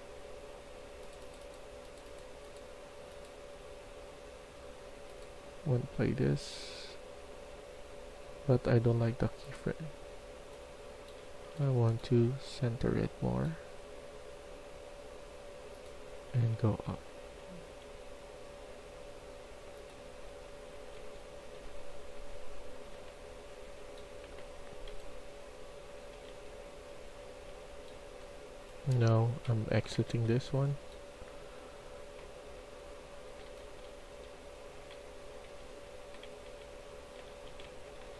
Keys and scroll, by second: 10.9-11.5 typing, 16.0 q, 16.3 q, 20.7-21.7 typing, 22.8 a, 24.1-30.0 typing, 33.3-38.1 typing.